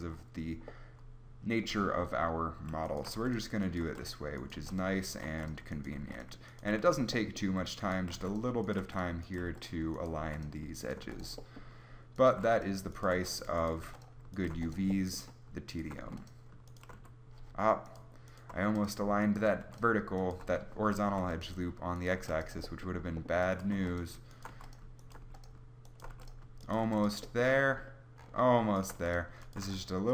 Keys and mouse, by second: 2.8 click, 3.2-6.8 typing, 8.1-11.0 typing, 12.4 w, 13.2 w, 13.8 w, 14.6 w, 16.0 w, 16.9 w, 18.6 w, 19.6 w, 21.1 w, 22.2 w, 23.8-26.8 typing, 29.0-30.1 typing.